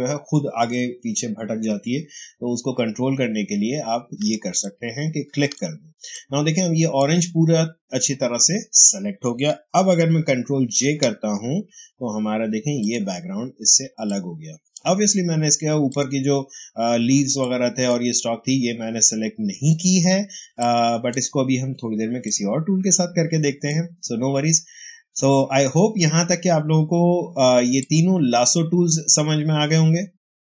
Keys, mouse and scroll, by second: 4.1 ctrl+space, 4.5 ctrl+click, 4.6 ctrl+space, 6.1 click, 6.2 space, 10.6 ctrl+j, 12.7 click, 13.7 space, 14.0 click, 14.2 space, 15.8 click, 15.8 click, 16.9 space, 17.3 click, 17.5 space, 20.4 space, 20.5 click, 20.9 space, 22.1 click, 22.2 space, 27.7-30.4 drag.